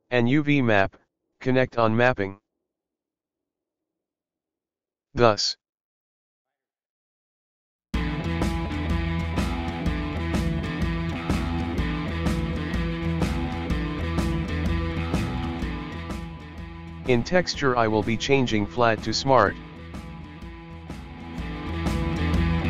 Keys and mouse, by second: 7.9 click, 15.2 click, 22.3-22.6 drag.